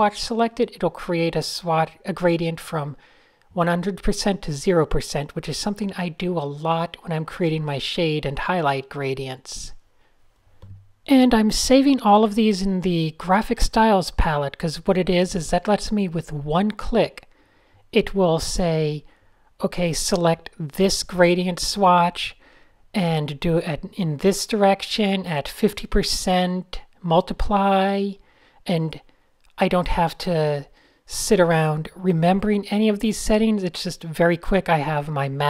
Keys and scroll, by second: 0.3 alt+shift+super+g, 0.5 typing, 0.6 Return, 0.9 fn+F11, 1.1 Return, 1.9-5.7 typing, 6.7 alt+shift+super+g, 6.7-10.1 typing, 11.8 F7, 12.2-13.0 typing, 12.6 alt+shift+super+g, 14.5 Right, 14.9-19.0 typing, 16.1 alt+BackSpace, 20.9 super+z, 22.7 super+h, 25.3 shift+super+a, 25.4 d, 25.6 Tab, 27.5 p, 28.3 super+z, 30.2 shift+super+a, 32.2 shift+super+a, 33.2 n, 33.6 super+space, 33.7 Tab, 35.2 a.